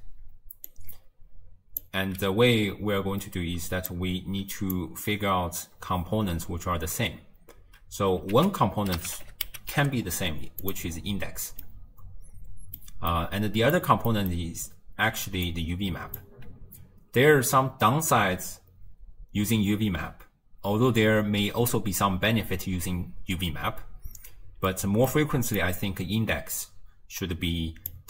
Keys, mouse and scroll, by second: 0.7 click, 4.0 click, 8.4 ctrl+a, 11.0-11.7 scroll up 1, 11.7-14.7 middle drag, 14.7-15.4 d, 15.5-16.2 drag, 16.2 d, 18.7 d, 24.8 middle click, 25.6 click.